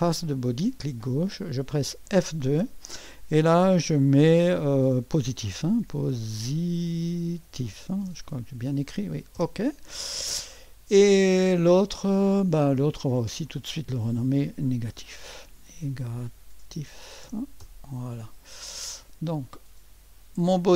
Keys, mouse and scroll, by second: 2.0 F2, 5.3-8.6 typing, 9.3 Return, 12.7 click, 13.0-14.4 drag, 14.4 F2, 14.9-18.1 typing.